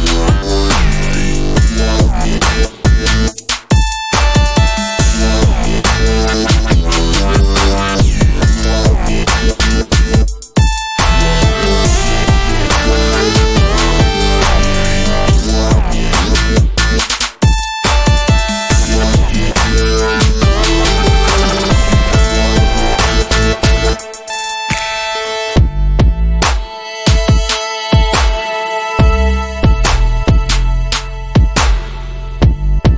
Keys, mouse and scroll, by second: 1.6 ctrl+scroll down 1, 2.1 click, 9.3 click, 10.3 ctrl+scroll up 1, 11.2-14.5 drag, 14.5 ctrl+g, 14.8 click, 15.2-16.2 typing, 16.4-22.5 drag, 23.8 0, 24.2 Return, 25.5 click, 26.1-27.1 typing, 28.5 click, 29.3 8, 29.7 Return, 30.6 click, 31.4 6, 31.5 Return.